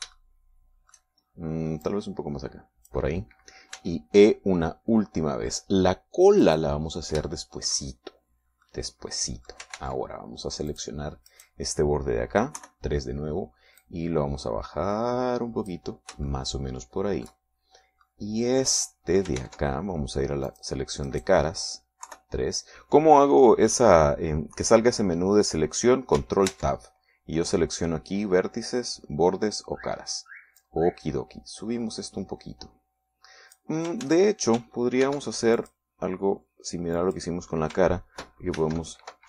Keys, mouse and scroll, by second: 0.8 click, 1.2-2.6 shift+middle drag, 3.0-4.2 drag, 4.8 e, 7.6 click, 8.4 shift+middle click, 9.8-10.9 middle drag, 10.9 ctrl+Tab, 11.8 click, 12.4 right click, 13.7 KP_3, 14.9-17.0 drag, 17.4-18.6 shift+middle drag, 18.6-19.2 shift+scroll up 1, 19.2-20.5 middle drag, 20.5 ctrl+Tab, 21.6 click, 22.2 middle click, 23.2 KP_3, 27.6 ctrl+Tab, 31.7-34.9 drag, 35.2 ctrl+z, 36.2 ctrl+r, 36.7 ctrl+click, 38.1 click.